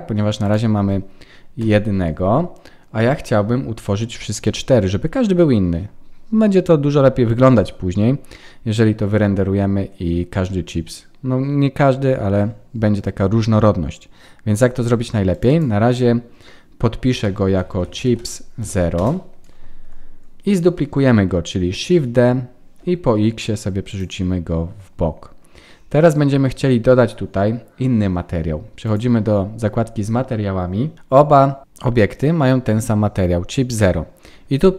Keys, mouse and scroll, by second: 0.4 click, 1.5 KP_1, 3.0-4.2 scroll up 2, 4.4 shift+middle click, 4.4 scroll up 1, 15.3 click, 15.4 click, 21.8 shift+d, 28.8 click, 29.7-30.3 scroll up 4.